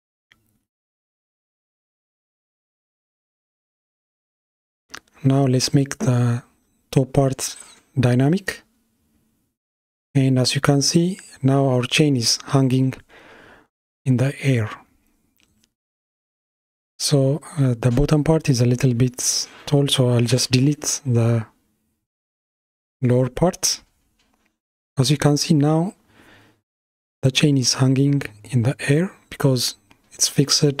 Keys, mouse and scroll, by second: 3.5 click, 4.6-5.6 middle drag, 5.6 click, 7.0 space, 11.3 KP_1, 13.7 space, 15.6 click, 19.0 Delete, 20.5-21.2 middle drag, 21.2 space, 29.9-30.8 middle drag.